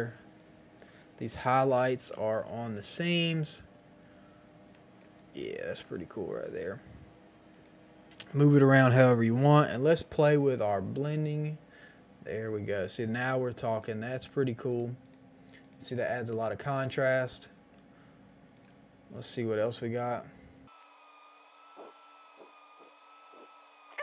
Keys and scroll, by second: 2.0 Return.